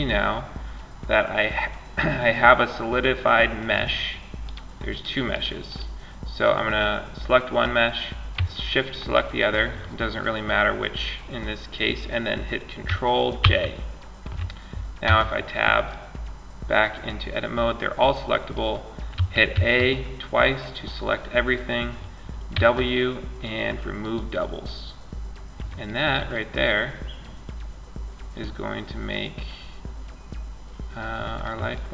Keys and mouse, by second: 3.6-6.9 drag, 8.2-12.6 drag, 12.6 ctrl+j, 14.3 Tab, 15.1-16.3 middle drag, 18.3 a, 18.7 a, 21.7 w, 28.9 middle click, 29.1 middle click, 29.3 middle click, 29.8 middle click, 30.4 middle click, 30.6 middle click, 30.9-31.9 middle drag.